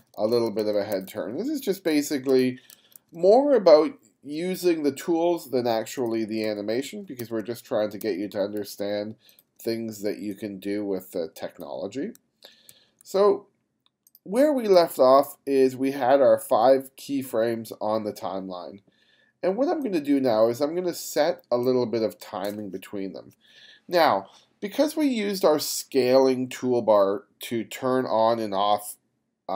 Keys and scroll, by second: 0.0 g, 0.9 f, 2.4 g, 6.5 f, 7.2 g, 8.5 g, 9.6 b, 10.1 b, 12.2-13.5 typing, 21.4 space, 22.2 space.